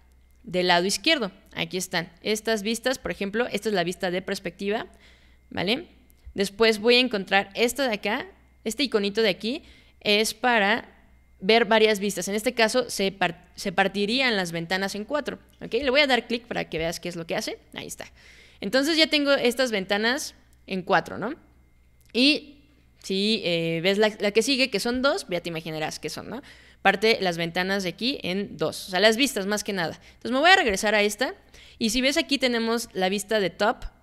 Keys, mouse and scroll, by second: 3.1 click, 16.8 click, 24.9 click, 30.7 click.